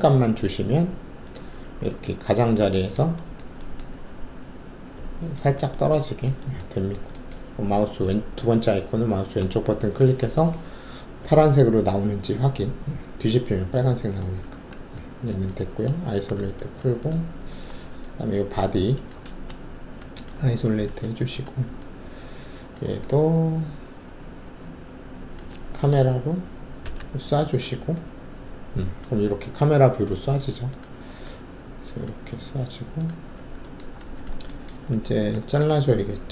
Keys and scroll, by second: 14.4 alt+`, 16.0 alt+shift+a, 19.2 alt+shift+a, 26.8 ctrl+alt+shift+c.